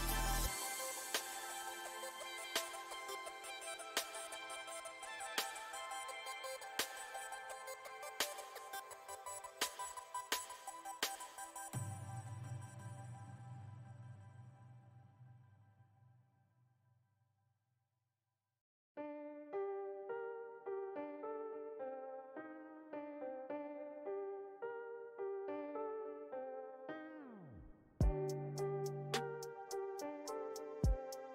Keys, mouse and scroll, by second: 0.0 middle click, 0.9 click, 1.3 middle click, 2.0 click, 2.9-3.9 shift+middle drag, 3.9-8.9 drag, 8.9 middle click, 9.5-10.8 drag, 10.8 middle click, 11.7-12.8 drag, 12.8 middle click, 13.6 click, 14.5 middle click, 15.4 f, 16.3 f, 17.1-20.1 drag, 21.1-24.0 middle drag, 24.0 k, 24.3-25.4 middle drag, 25.4 f, 26.1 middle click, 26.9-30.0 drag, 30.0 middle click, 30.6 shift+click, 31.1 middle click.